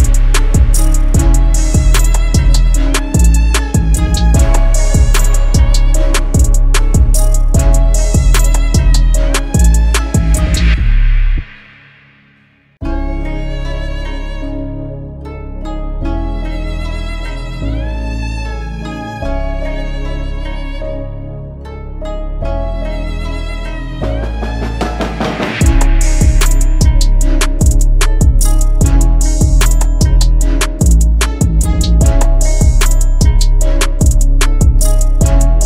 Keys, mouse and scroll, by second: 2.0 alt+click, 7.3-8.3 typing, 18.4 ctrl+t, 22.6 Return, 25.8-28.6 scroll down 1.